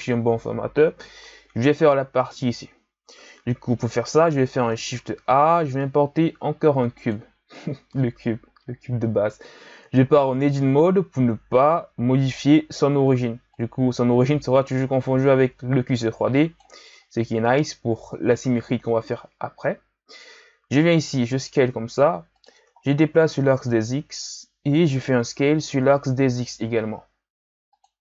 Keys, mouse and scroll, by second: 0.8 KP_1, 5.0 shift+a, 10.4 Tab, 13.5-16.6 drag, 16.9-18.1 ctrl+scroll up 6, 18.1-21.1 ctrl+scroll up 7, 21.1 s, 22.8 scroll down 2, 23.0-23.7 scroll up 3, 23.7-25.4 drag, 25.4 s.